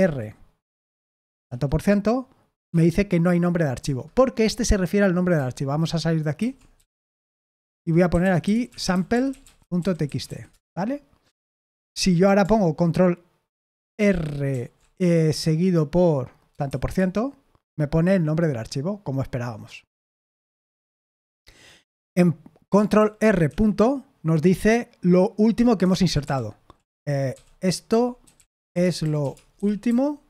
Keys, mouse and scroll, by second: 1.4 shift+5, 2.6 Escape, 6.5-11.7 typing, 14.5 ctrl+r, 16.6 shift+5, 20.2 Escape, 21.8 o, 22.9 ctrl+r, 23.4 ., 25.8 Escape, 26.2 o, 27.3-30.2 typing.